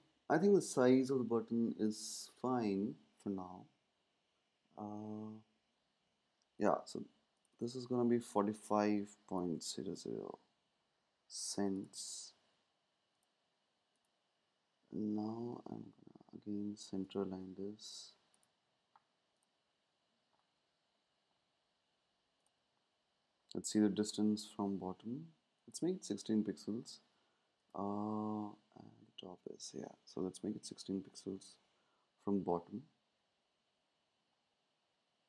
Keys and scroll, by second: 8.7 Right, 9.4-10.3 typing, 29.9 Down.